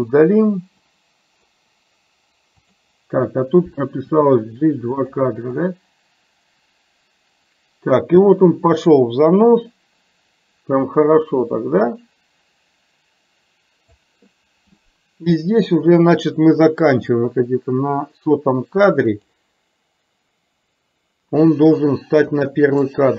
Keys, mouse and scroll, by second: 0.9 click, 2.7 click, 4.1 g, 5.7-14.1 drag, 17.2-19.4 drag, 22.6-22.9 drag.